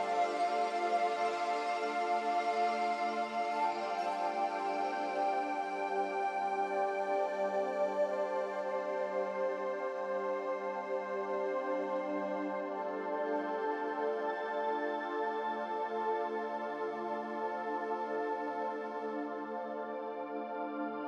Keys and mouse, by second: 0.3 click, 1.9 shift+click, 2.5 shift+click, 3.2 shift+click, 4.0 shift+click, 5.0 shift+click, 7.0 shift+click, 8.3 shift+click, 10.5 shift+click, 14.6 middle click, 16.6 middle click.